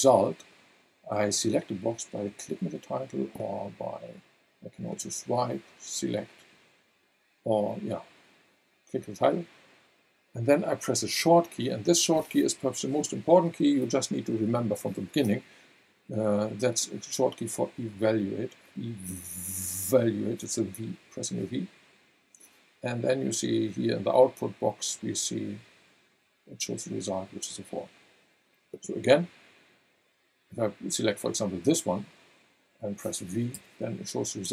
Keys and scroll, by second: 21.1 v, 33.5 v.